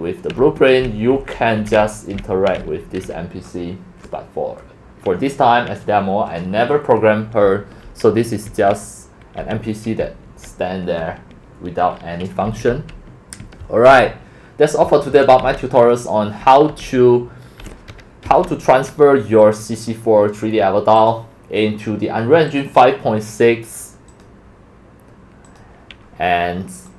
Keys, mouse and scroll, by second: 0.0-3.2 typing, 7.4 w, 8.5 a, 9.4 s, 10.2 s, 12.4-18.7 typing, 19.4 click, 19.5-21.1 drag, 21.1 click, 22.5 click, 22.8 click, 24.1 click, 25.5 click, 26.9 click.